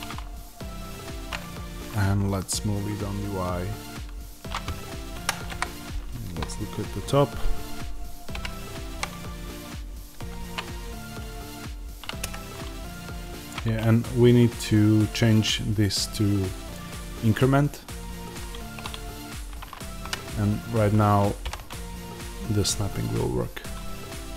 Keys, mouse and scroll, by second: 5.2 Escape, 5.4 KP_7, 6.2 scroll down 1, 8.2 g, 12.2 Escape, 19.9-24.3 drag, 19.9 g.